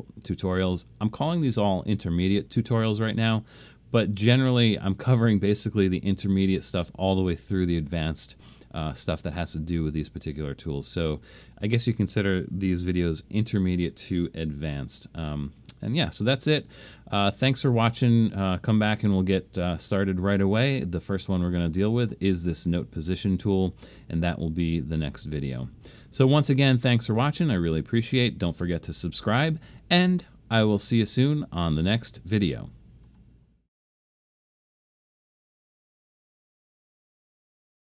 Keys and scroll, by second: 15.5 super+-, 16.1 super+-, 16.8 super+-.